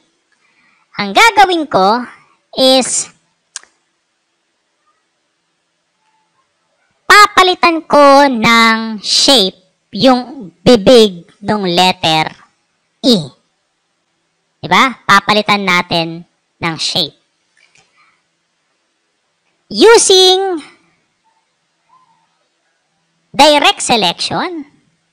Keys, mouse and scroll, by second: 2.1 alt+scroll up 2, 15.7 space, 15.9 click, 20.6 right click, 23.6 click.